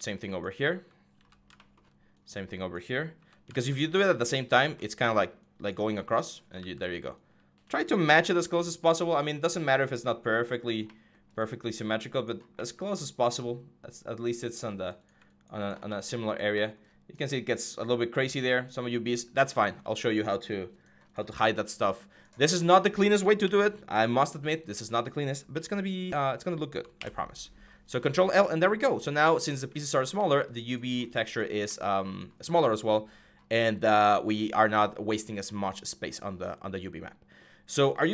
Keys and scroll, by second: 0.9 g, 2.9 g, 4.4 g, 6.3 ctrl+z, 8.0 g, 23.2 ctrl+u, 25.3 ctrl+u, 26.8 ctrl+i.